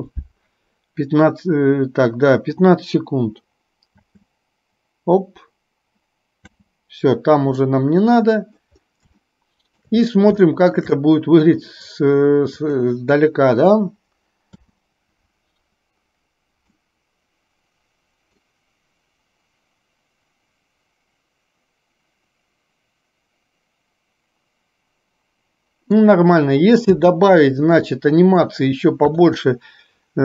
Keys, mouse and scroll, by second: 4.0 space, 6.5 space, 7.6-8.8 middle drag, 7.6 scroll up 1, 9.4-9.9 shift+middle drag, 10.6 shift+middle drag, 11.0-11.5 middle drag, 12.6 click, 14.5 space, 16.9-25.5 middle drag, 27.0 space, 27.9-28.5 middle drag, 29.1 KP_3.